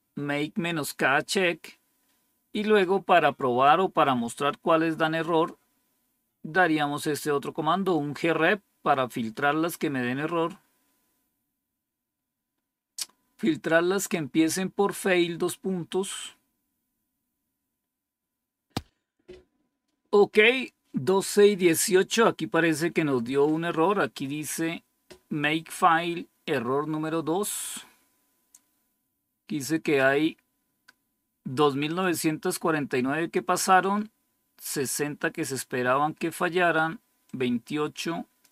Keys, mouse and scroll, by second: 31.9-33.3 drag, 34.8-36.2 drag, 37.2-38.4 drag.